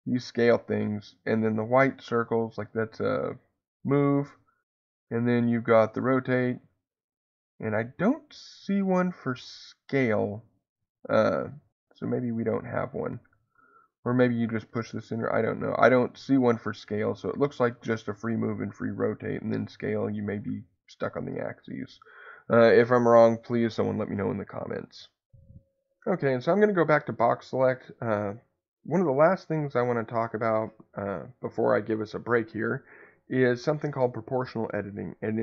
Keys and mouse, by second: 0.5 Escape, 1.6-3.8 drag, 3.8 Escape, 5.0-6.4 drag, 11.5-13.0 drag, 12.9 Escape, 14.7 click, 15.3 Escape, 16.2-17.7 drag.